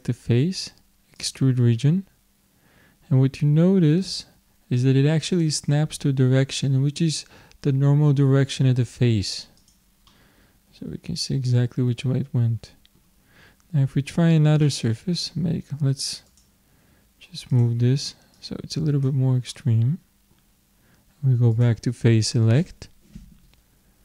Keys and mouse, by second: 10.1-11.8 middle drag, 14.6-16.3 middle drag, 16.3-19.5 drag, 19.5-21.5 middle drag, 21.5-23.4 drag.